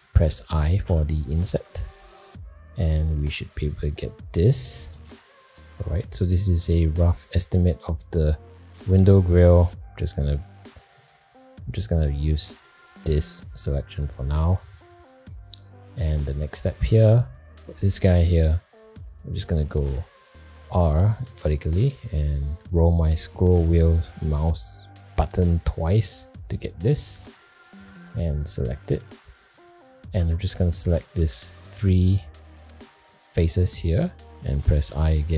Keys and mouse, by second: 0.8 i, 14.1 middle click, 14.8 shift+middle click, 15.8 shift+middle click, 20.5 ctrl+r, 29.4 click, 30.2 3, 30.4 click, 31.1 shift+click, 34.9 i.